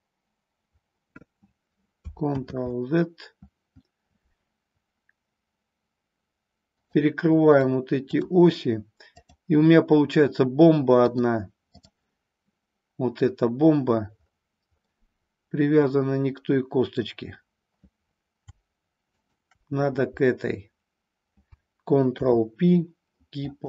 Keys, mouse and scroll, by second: 2.4 ctrl+z, 6.8 click, 7.5 click, 9.0 click, 11.0-11.9 drag, 14.9-17.0 middle drag, 19.0 shift+click, 22.0 ctrl+p.